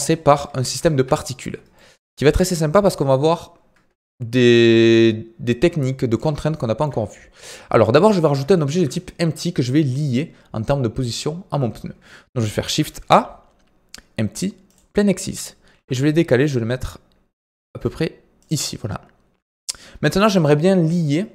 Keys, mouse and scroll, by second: 0.6 KP_1, 0.9 KP_3, 1.7-2.8 shift+middle drag, 2.8-5.9 drag, 6.5-7.8 shift+middle drag, 7.8-8.2 scroll up 2, 8.2-8.5 scroll down 2, 8.5-11.5 shift+middle drag, 12.5 shift+a, 15.7 g.